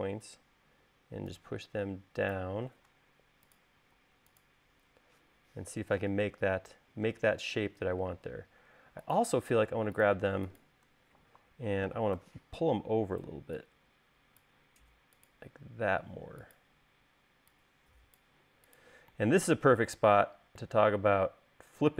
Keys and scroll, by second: 4.3 space, 12.5 v.